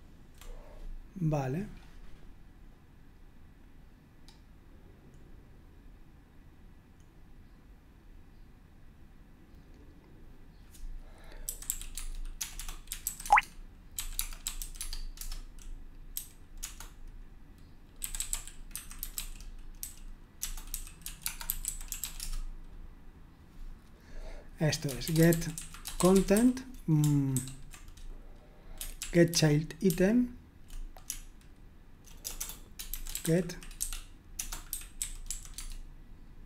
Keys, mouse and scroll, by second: 1.7-2.9 scroll up 2, 4.2-5.1 scroll up 2, 5.2-6.2 scroll down 2, 8.1-8.9 scroll down 2, 9.1-9.9 scroll down 2, 11.7-22.6 typing, 25.0-26.8 typing, 27.3 ctrl+w, 29.0 ctrl+p, 29.3 ctrl+p, 29.9 ctrl+p, 31.1-35.7 typing.